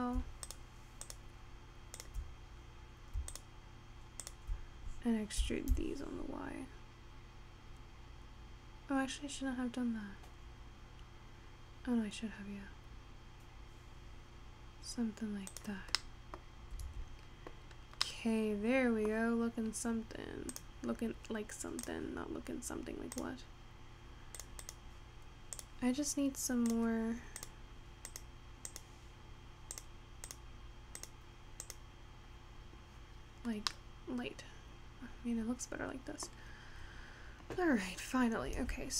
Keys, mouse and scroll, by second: 0.1 middle click, 1.2 shift+click, 2.1 shift+click, 2.7-3.5 scroll down 2, 3.5 shift+click, 4.4 shift+click, 5.5 e, 16.0 middle click, 16.6-17.0 scroll down 2, 17.0 Tab, 17.6-18.2 scroll down 2, 18.2-19.6 middle drag, 19.6 scroll down 1, 20.6-24.8 drag, 25.6-28.7 drag, 33.3 scroll up 3, 33.6 scroll down 2, 33.8-36.9 middle drag, 36.9-38.2 scroll down 4, 38.2-38.7 scroll up 2, 38.7 Tab.